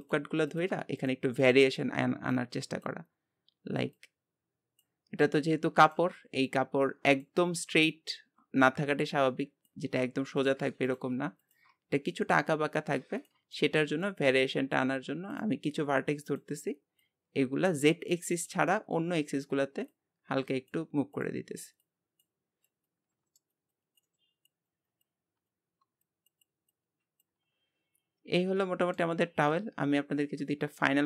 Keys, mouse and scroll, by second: 5.1 scroll up 1, 5.8-10.5 drag, 10.9-13.5 shift+drag, 13.5-15.3 shift+middle drag, 15.3-18.7 drag, 18.7-19.9 middle drag, 19.9-23.0 drag, 23.3 shift+middle click, 23.9 click, 24.3 middle click, 24.6-28.1 drag, 28.1 Tab, 28.2-31.0 middle drag.